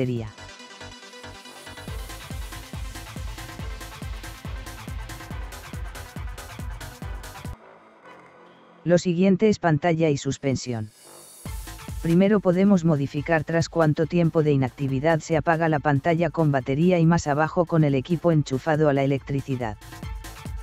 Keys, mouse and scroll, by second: 0.7 scroll down 2, 1.2 scroll up 1, 2.4 click, 5.5 click, 8.5 click, 9.9 scroll down 2, 10.0 scroll up 1, 11.5 click, 12.7-13.2 scroll down 2, 13.8 click, 15.8 click, 17.9 click, 18.9 click, 19.8-20.2 scroll down 3.